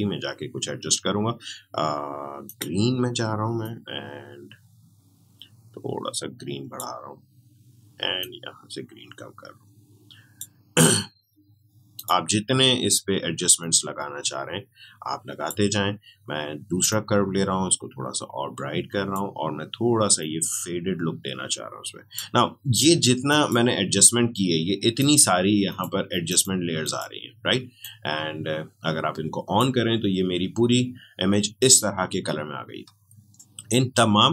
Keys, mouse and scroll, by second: 2.4-32.0 drag.